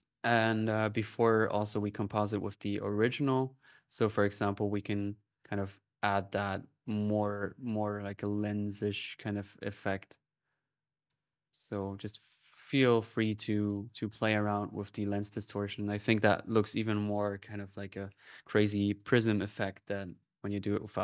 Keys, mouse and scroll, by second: 1.7-2.9 drag, 4.0-6.9 drag, 7.3-9.6 drag, 9.7-10.9 drag, 11.7-13.8 drag, 14.3 click, 18.8-19.8 drag, 19.9-21.0 drag.